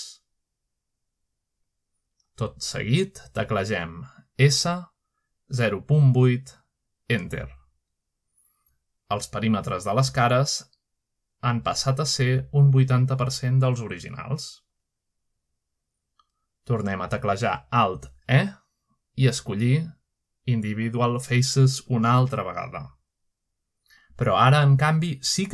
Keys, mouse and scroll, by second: 1.1-3.1 middle drag, 3.4 click, 6.9-8.0 typing, 9.0 Return, 10.9 middle click, 11.5-11.8 scroll up 1, 16.4-17.2 scroll down 2, 16.8 middle click, 17.3 middle click, 17.6-18.9 scroll up 1, 19.3 alt+e, 22.9 click, 23.3 click.